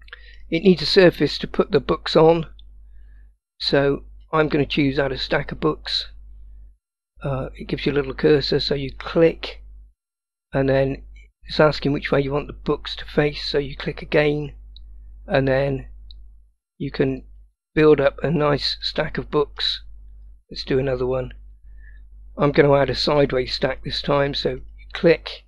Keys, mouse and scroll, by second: 5.5-17.7 drag, 18.1-18.9 scroll up 3, 18.9-19.7 middle drag, 23.1-25.4 drag.